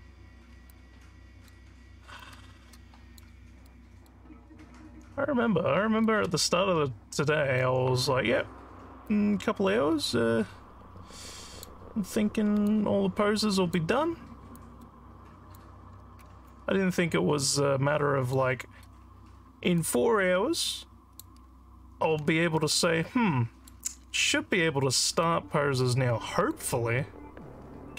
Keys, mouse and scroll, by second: 0.8 click, 2.2-3.2 alt+drag, 3.6 alt+middle click, 4.0 alt+scroll down 1, 4.5 alt+middle click, 6.0-7.5 alt+drag, 9.1-11.6 drag, 12.6-13.7 alt+drag, 14.5-15.5 drag, 16.5-18.3 alt+drag, 19.8-21.2 drag, 22.6-23.6 alt+middle drag, 25.2-26.5 drag.